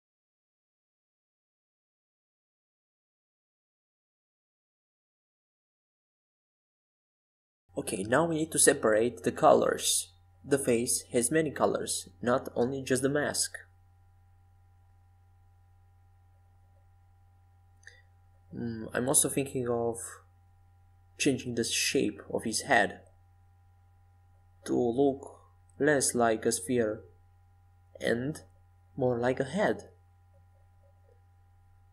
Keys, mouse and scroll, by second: 11.9 z, 13.4 a, 14.0 a, 15.1 c, 26.6 s, 31.3-31.9 middle drag.